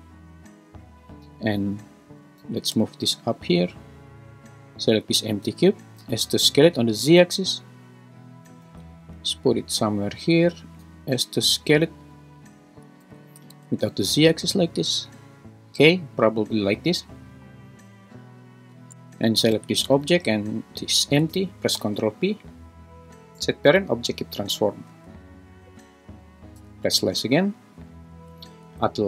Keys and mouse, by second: 2.4 g, 2.7 z, 6.0 s, 6.5 z, 8.6 g, 10.1 click, 10.8 s, 13.0 s, 13.5 shift+z, 19.5 g, 19.9 Escape, 20.8 shift+click, 21.7 ctrl+p, 25.0 `, 26.6 /, 28.5 shift+Right.